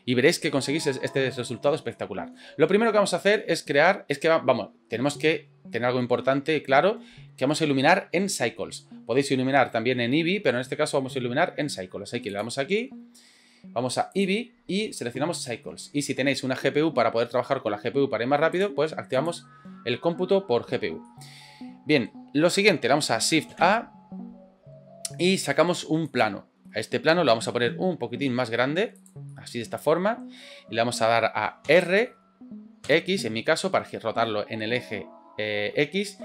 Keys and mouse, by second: 1.9-2.4 middle drag, 12.3 click, 14.1-15.6 drag, 18.5-19.4 drag, 21.1-22.1 middle drag, 23.5 shift+a, 27.5 s, 29.3 middle click, 31.7 r.